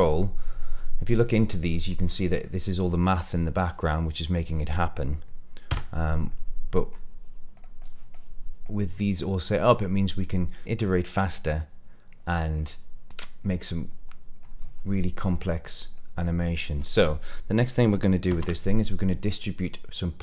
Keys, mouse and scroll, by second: 1.1 click, 1.7 scroll down 2, 2.0 middle click, 5.6 Tab, 6.2 middle click, 6.8 scroll up 1, 7.5 click, 7.7 click, 8.6 click, 9.4 middle click, 10.6 click, 11.4-12.5 drag, 13.0 click, 13.1 middle click, 13.1-13.4 scroll down 2, 14.0 middle click, 14.8-16.0 middle drag, 16.7 click, 18.2 shift+a.